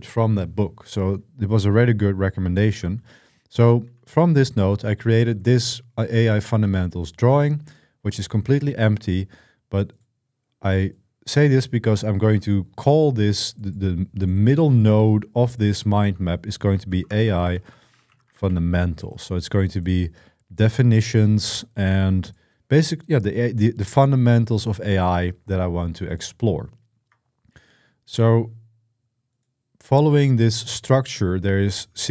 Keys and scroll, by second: 2.5-5.2 typing, 6.1 ctrl+l, 16.3-18.8 typing.